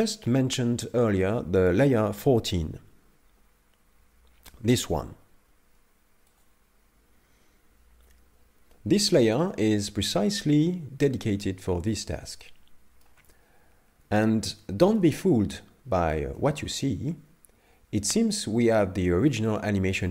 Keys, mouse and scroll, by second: 6.3 click, 12.4 shift+middle click, 14.1 a, 14.6 shift+middle click, 15.1 scroll down 1, 15.5 middle click, 16.4 shift+middle click.